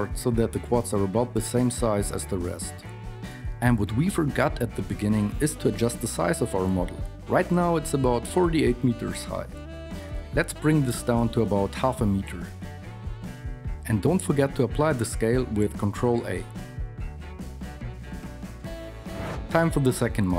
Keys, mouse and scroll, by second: 0.1 Tab, 0.1 ctrl+r, 3.6 a, 4.8 KP_1, 5.1 Tab, 6.0 n, 7.7 s, 12.9 s, 15.3 ctrl+a.